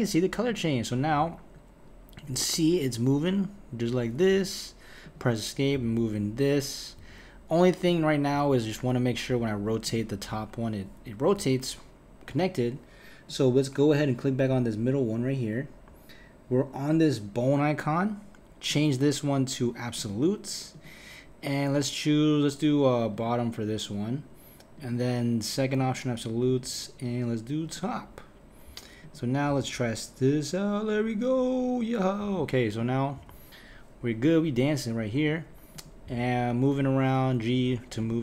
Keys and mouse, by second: 0.5 click, 1.1 g, 5.0 click, 5.7 g, 7.9 click, 8.3 r, 9.8 click, 10.3 r, 13.3 click, 18.7-23.9 drag, 24.8-29.1 drag, 29.5 r, 32.8 click, 33.2 r, 35.7 click, 36.0 g, 38.0 click.